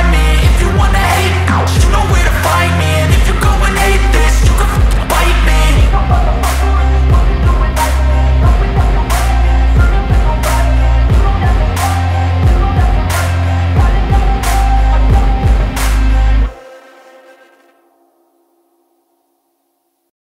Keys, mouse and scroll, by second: 0.1 click, 11.8 click.